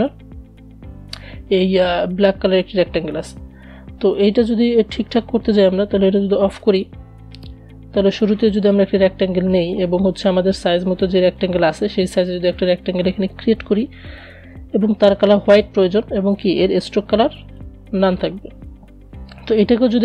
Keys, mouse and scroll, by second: 4.9 click, 6.3 right click, 7.9-14.7 drag.